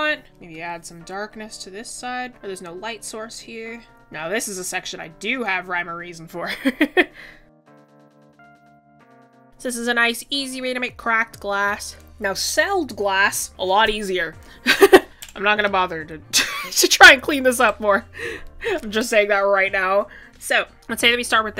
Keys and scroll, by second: 6.4 ctrl+z.